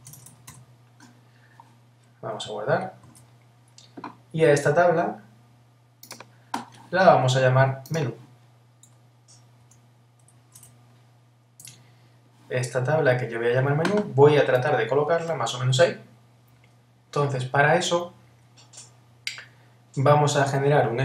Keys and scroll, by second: 3.1 super+s, 11.6 Return.